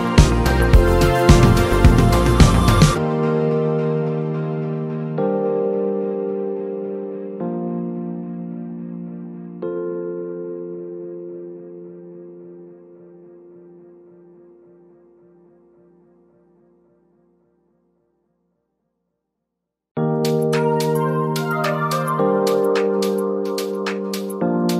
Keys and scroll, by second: 8.7 z, 9.3 space, 14.2-15.4 typing, 17.5-19.1 typing, 21.3-24.7 typing.